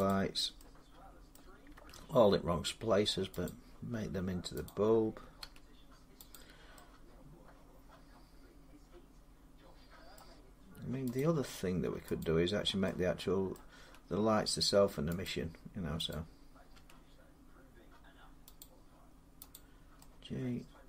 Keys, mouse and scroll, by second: 1.1 middle click, 1.5 g, 3.2 click, 4.4 click, 5.2 g, 6.1 click, 9.9 middle click, 11.0 click, 12.0 click, 13.5 middle click, 13.6 g, 15.0 click, 15.9 click, 16.5 g, 18.4 click, 19.3 click.